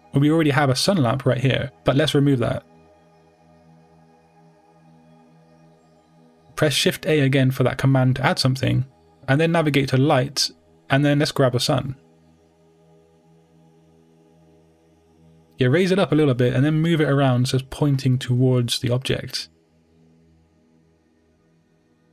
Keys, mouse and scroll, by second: 0.5 scroll down 1, 0.9-1.9 middle drag, 1.9 click, 2.1 g, 2.7 right click, 3.2-18.9 middle drag, 3.8 x, 18.9-19.9 drag.